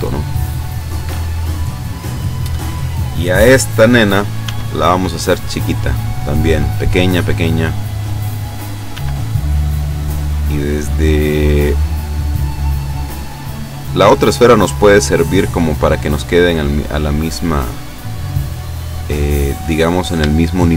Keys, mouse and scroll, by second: 0.4-0.8 scroll down 1, 1.2-2.5 middle drag, 3.4-4.0 scroll up 1, 4.4 s, 5.9 click, 7.0 click, 7.7-8.0 scroll up 1, 8.9 s, 11.6 click, 12.9 click, 15.1 click, 16.4 click, 17.9 scroll up 1, 19.9-20.2 scroll up 1, 20.4 shift+middle click.